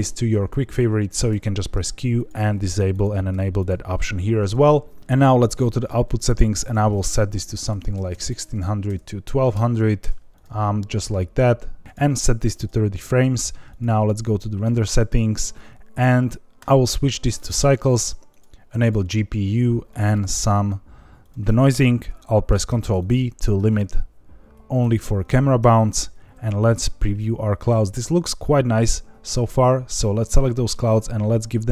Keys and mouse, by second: 0.5 Escape, 1.2 q, 2.6 q, 3.2 q, 5.0 n, 6.6-10.4 drag, 8.1 KP_0, 9.9 KP_Enter, 11.8 click, 16.7-17.5 drag, 18.3 click, 19.8 click, 21.2 click, 22.6 ctrl+b, 26.0 z, 30.7 click.